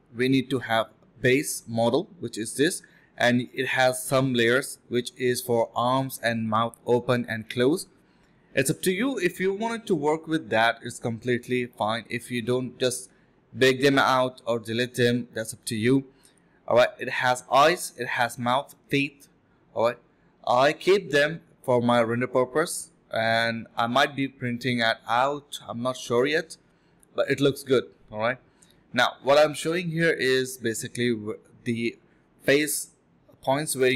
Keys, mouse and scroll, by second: 16.9 alt+click, 17.1 alt+double click, 17.3 alt+double click, 17.5 alt+click, 17.7 alt+click, 18.2 alt+click, 19.0 alt+click, 19.8 alt+click, 19.8 scroll down 1, 20.1 middle click, 22.4 middle click, 22.6 scroll up 1, 22.8 scroll down 1, 23.0 middle click, 23.1 scroll up 1, 24.2 scroll down 1, 24.4 middle click, 24.6 scroll up 1, 24.9 middle click, 25.4 scroll down 1, 25.6 middle click, 28.0 alt+click, 28.2 alt+click.